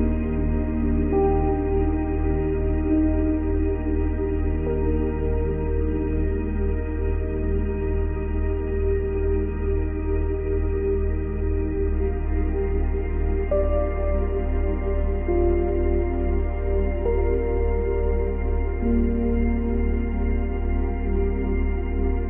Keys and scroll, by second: 6.5 space, 9.4 space, 11.4 ctrl+z, 12.8 ctrl+z, 19.1 space, 21.9 space.